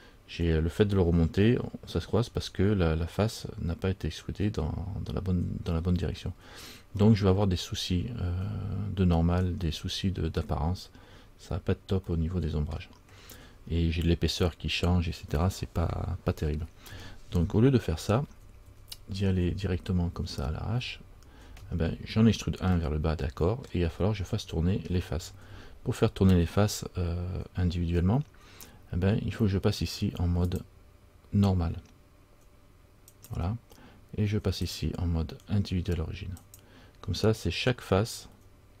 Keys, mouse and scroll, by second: 6.5-7.1 scroll down 2, 7.1 scroll down 1, 7.2 middle click, 9.9 middle click, 12.3 middle click, 13.1 scroll down 1, 18.1 ctrl+z, 18.4 ctrl+z, 18.8 ctrl+z, 19.5 ctrl+z, 20.3 ctrl+z, 21.0 ctrl+z, 22.9 scroll up 1, 23.1 middle click, 23.8-24.5 scroll down 1, 30.7 click, 34.8 click.